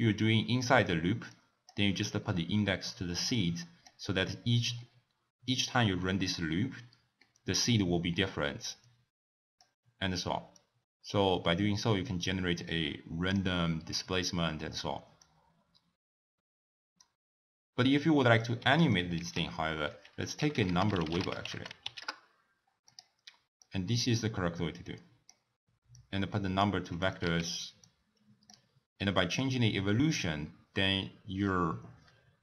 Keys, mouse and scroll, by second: 8.6-13.6 drag, 13.8-14.2 scroll down 2, 14.2-15.2 middle drag, 15.2-18.3 drag, 18.8 click, 19.1 ctrl+a, 21.5 g, 23.6 click, 25.9 drag, 27.0 click, 27.5 x, 27.8 click, 29.2-32.2 drag.